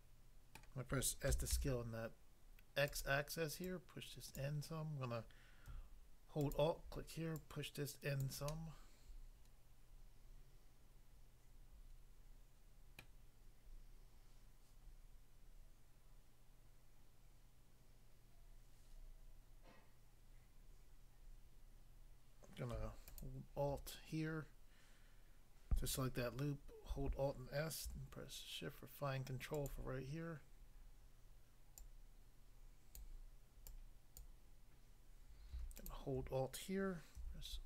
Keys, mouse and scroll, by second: 0.6 middle click, 1.2-2.3 typing, 2.9 click, 3.0 click, 3.7 click, 4.4 click, 6.4 alt+click, 6.5 alt+click, 7.4 alt+click, 8.2 click, 8.5 middle click, 13.0 middle click, 23.1 alt+click, 26.9 alt+s, 29.5 shift+click, 31.7 click, 32.9 click, 33.6 click, 34.2 click, 35.7 alt+click, 37.2 r.